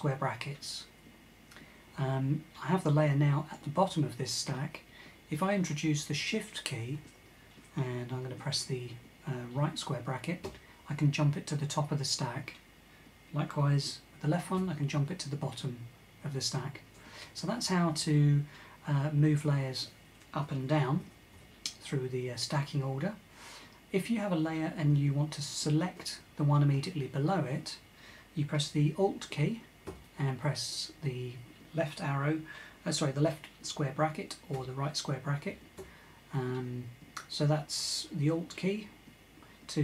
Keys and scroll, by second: 10.1 super+}, 14.2 super+{, 14.3 shift+super+[, 14.4 super+{, 20.7 super+], 21.0 super+], 29.5 alt+[, 34.2 alt+], 35.2 alt+[, 35.4 alt+[.